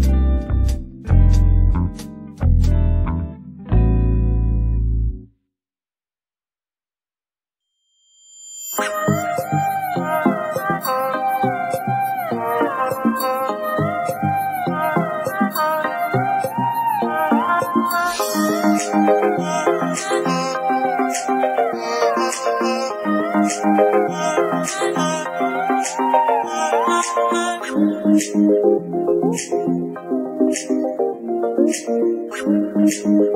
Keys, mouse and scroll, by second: 1.6-2.8 shift+middle drag, 8.5 middle click, 8.8-9.2 right drag, 9.2 middle click, 9.8 ctrl+Tab, 10.3 middle click, 10.9 g, 11.4 z, 11.8 middle click, 12.3-12.8 scroll up 1, 12.8 click, 13.3 f, 13.8 click, 14.6-15.8 middle drag, 15.8-19.3 drag, 19.3 Tab, 19.6 click, 19.8 g, 20.4 click, 20.5 g, 21.2 click, 21.3 g, 21.9-23.1 middle drag, 23.3 middle click, 23.8 KP_3, 24.1 Tab, 24.2 scroll down 3, 24.3 alt+a, 25.2 ctrl+Tab, 25.7 middle drag, 25.9 ctrl+a, 26.4 alt+a, 26.7 KP_1, 26.9 scroll down 3, 27.1-28.0 shift+middle drag, 28.0-28.6 scroll up 1, 28.6 KP_1, 28.9-30.4 shift+middle drag, 32.3 scroll down 1, 32.4 scroll up 2, 32.6-33.3 shift+middle drag.